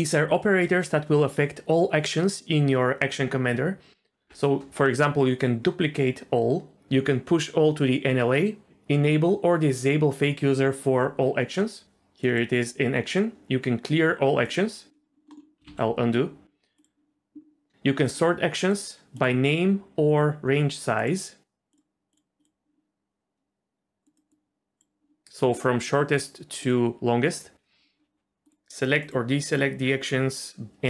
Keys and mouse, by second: 15.7 ctrl+z, 16.8-24.0 drag, 24.3 click, 25.5-30.8 drag.